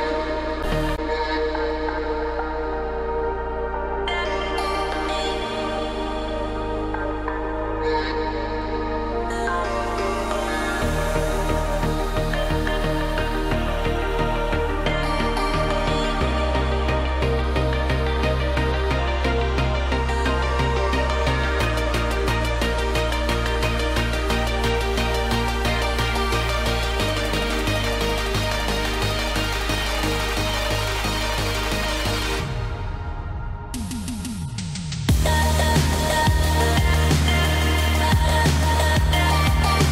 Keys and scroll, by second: 24.6 shift+F5, 33.5 ctrl+t.